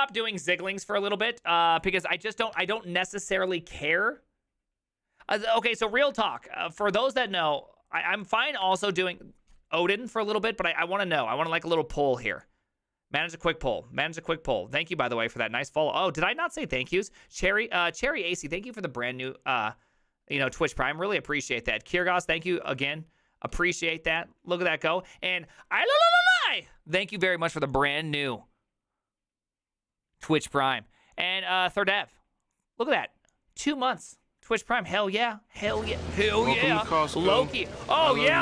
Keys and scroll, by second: 2.6 alt++, 6.1 alt++, 6.9 alt+f, 8.7 alt+f.